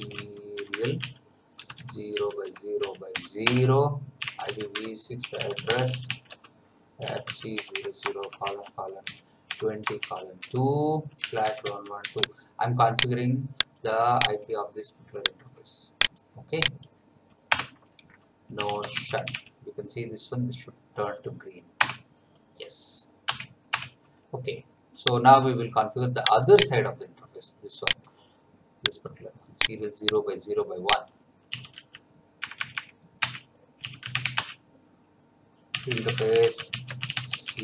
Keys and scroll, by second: 0.0-12.0 typing, 4.7 Tab, 17.5 Return, 18.3-19.8 typing, 21.8 Return, 23.2 Return, 31.2-32.4 typing, 33.2 Return, 33.5-37.6 typing.